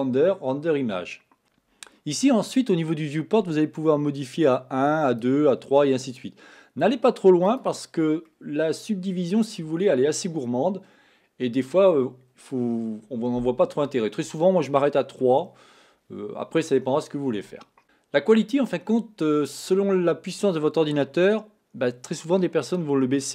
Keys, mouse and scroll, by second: 5.2-6.3 drag, 7.5 click, 8.3-11.4 middle drag.